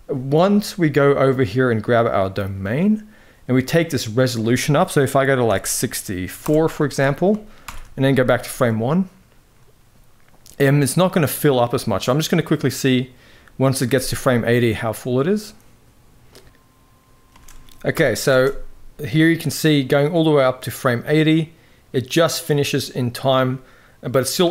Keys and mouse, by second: 1.8 click, 3.8-6.1 drag, 7.4 shift+Left, 8.1 space, 17.1 space, 17.6 shift+Left, 17.9 space, 24.4 space.